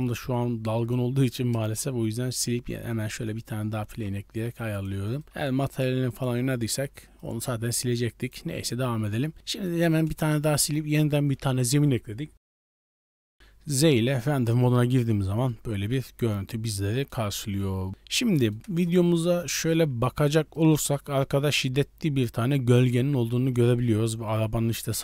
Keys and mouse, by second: 0.6 click, 1.5 KP_0, 2.8 right click, 3.2 right click, 3.7 g, 5.0 right click, 5.2 g, 7.1 right click, 7.9 click, 8.4 Tab, 9.3-10.1 middle drag, 10.1 KP_0, 13.0 z, 18.6 KP_0, 19.3 middle click, 19.9 z, 20.6 shift+middle click, 23.7-24.1 shift+middle drag.